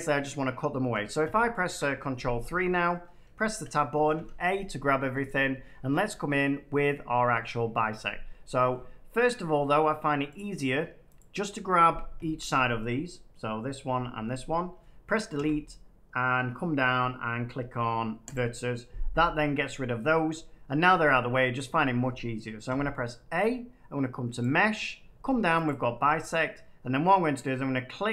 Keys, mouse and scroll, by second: 1.1 ctrl+3, 2.7 shift+middle click, 2.8 shift+middle click, 3.4 Tab, 10.3 click, 11.1 click, 15.3 Delete, 18.2 click, 22.6 a, 24.3 click, 25.6 click.